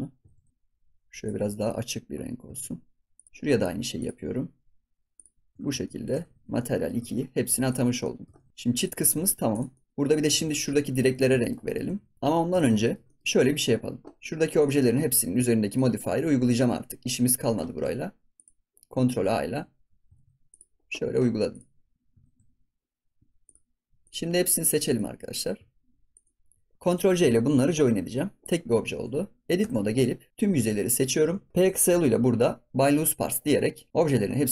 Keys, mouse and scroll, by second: 0.2 ctrl+s, 0.5 click, 2.5 ctrl+s, 3.1 click, 4.0-5.5 drag, 5.5 ctrl+s, 5.6 scroll up 1, 5.8-6.2 shift+middle drag, 6.2 ctrl+s, 6.5-7.0 shift+middle drag, 7.0 ctrl+s, 7.2-7.6 scroll down 3, 7.6 click, 7.8 scroll down 1, 8.0 middle drag, 8.3 ctrl+s, 8.5 middle drag, 8.7 click, 9.1 ctrl+s, 9.2 scroll down 3, 9.5 click, 9.7 middle click, 9.9 scroll up 3, 10.6 click, 11.0 ctrl+s, 11.1-11.4 scroll down 2, 11.4 shift+middle click, 11.8 ctrl+s, 12.2 middle click, 12.5 ctrl+s, 12.8-14.2 shift+middle drag, 14.5 click, 15.6 click, 16.6 ctrl+a, 17.0 ctrl+a, 17.6 ctrl+s, 18.3 click, 19.1 ctrl+a, 20.1 ctrl+a, 21.5 click, 22.2 ctrl+a, 23.4 click, 24.8 shift+click, 25.3-26.1 middle drag, 26.1 shift+click, 27.7 ctrl+j, 29.0-29.5 scroll down 1, 29.5 Tab, 30.3 a, 31.5 p.